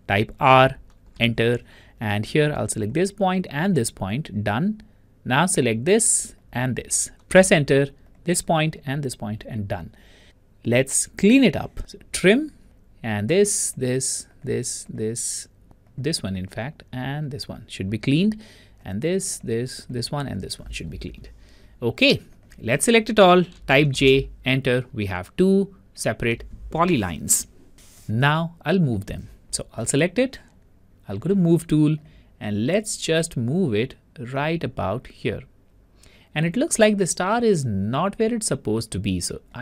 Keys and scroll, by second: 0.5 Return, 0.5 r, 7.5 typing, 7.7 Return, 23.9 Return.